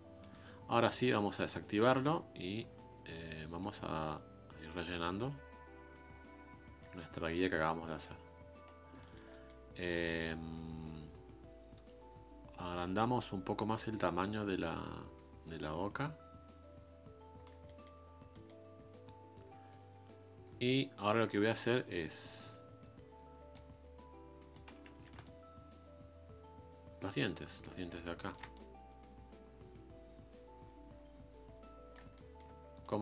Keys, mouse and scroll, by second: 6.9-8.0 middle drag, 8.0-9.0 drag, 9.0-10.0 shift+middle drag, 10.0-13.0 drag, 17.6 middle click, 18.1 scroll up 1, 18.3-20.8 middle drag, 20.8 scroll up 2, 23.5-24.8 ctrl+drag, 24.8 f, 25.2-28.0 ctrl+drag, 28.0 f, 28.5-31.5 ctrl+drag, 32.1 middle click, 32.8-33.0 ctrl+drag.